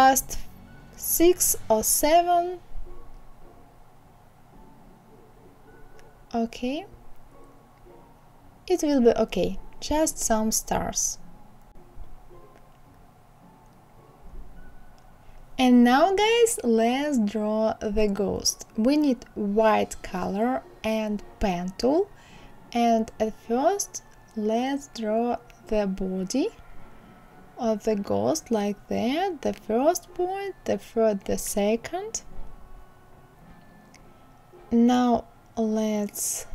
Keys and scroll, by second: 7.2 ctrl+z.